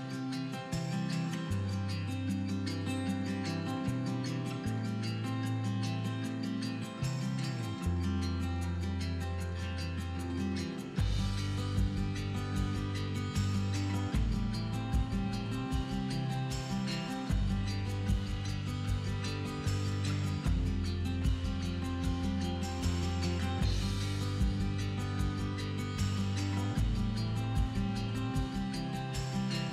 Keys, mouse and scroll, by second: 0.6 click, 0.7 middle click, 1.3 KP_1, 1.8 shift+middle click, 1.9 scroll up 1, 2.4 middle click, 2.4 s, 3.4 click, 3.6 middle click, 3.6 g, 4.3 click, 4.8-5.9 middle drag, 4.8 scroll up 2, 5.1 scroll down 2, 5.3 Tab, 5.9 ctrl+r, 6.6 click, 7.0 middle click, 7.1-7.6 scroll up 2, 7.3 shift+middle click, 7.6 scroll down 1, 7.7 middle click, 8.1 click, 8.4 middle click, 8.9 g, 9.6 click, 9.8 middle click, 10.2 scroll up 1, 10.3 middle click, 11.0 scroll up 1, 11.1 middle click, 11.3 click, 11.7 g, 12.3 scroll down 1, 12.4 middle click, 12.7 Tab, 13.4-14.5 drag, 14.4-14.8 scroll down 2, 14.5 middle click, 14.6 click, 14.7-16.1 middle drag, 15.3 scroll down 1, 15.6 scroll up 1, 16.1 click, 16.2-17.2 middle drag, 16.2 scroll down 1, 17.2 scroll up 2, 17.3-17.7 middle drag, 17.7 scroll down 2, 17.8 middle drag, 18.0-18.6 scroll up 2, 18.6 click, 18.8 scroll down 2, 19.0-20.1 scroll up 2, 20.2-28.2 drag, 21.9 Return, 23.7 s, 24.0 Return, 27.6 Return, 28.2-29.4 middle drag, 28.2 scroll down 2, 28.5-29.4 scroll up 2, 29.4 right click.